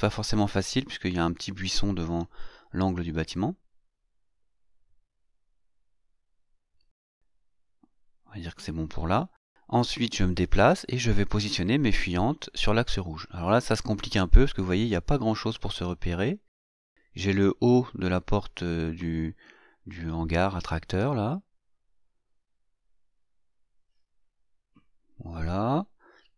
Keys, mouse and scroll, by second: 7.5 shift+middle click, 8.0 shift+scroll up 1, 8.2-10.3 shift+middle drag, 10.4-11.8 shift+middle drag, 12.0-13.6 scroll down 2, 13.8-16.6 drag, 17.4-18.5 ctrl+scroll up 4, 20.2 click, 23.7-26.2 scroll down 7.